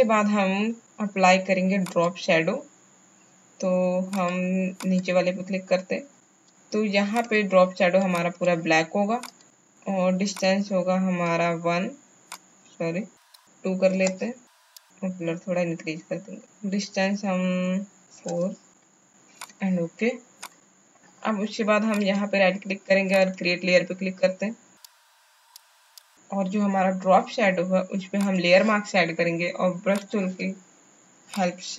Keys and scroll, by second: 18.5 KP_4.